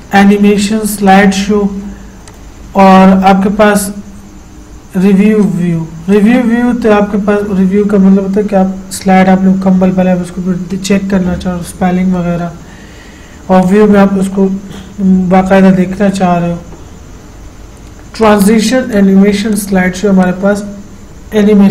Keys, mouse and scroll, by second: 0.0 click, 5.6 click, 13.8 click, 18.4 click.